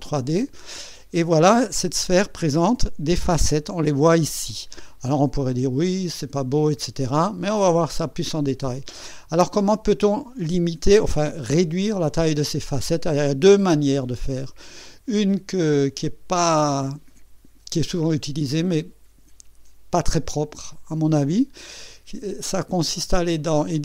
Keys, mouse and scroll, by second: 14.7 click, 16.4 click, 23.4 click.